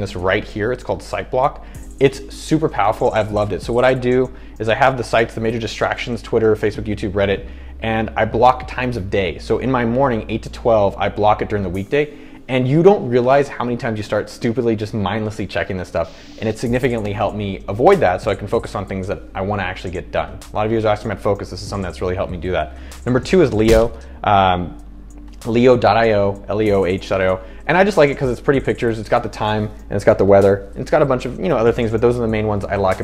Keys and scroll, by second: 24.0 super+1.